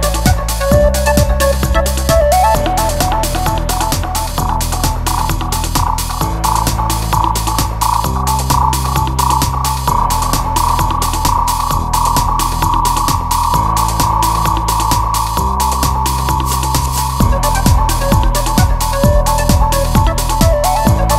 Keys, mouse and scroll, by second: 2.1 shift+F3, 3.4 n, 7.2 shift+a, 12.6 g, 13.4 b, 14.0 g, 19.0 shift+a.